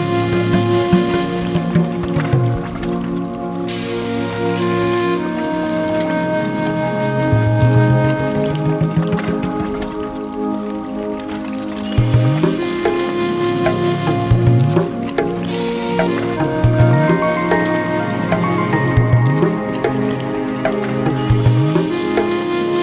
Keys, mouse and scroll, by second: 1.1-1.8 drag, 2.2 click, 5.6 Tab, 5.7-6.2 drag, 6.7 shift+d, 7.6 p, 7.9 Tab, 8.0 click, 9.4 g, 9.9-12.4 drag, 13.2 g, 14.1 g, 14.7 Tab, 15.0 click, 15.5-16.2 right drag, 16.2-17.4 drag, 17.6 Tab, 17.9 right click, 18.5-21.7 drag.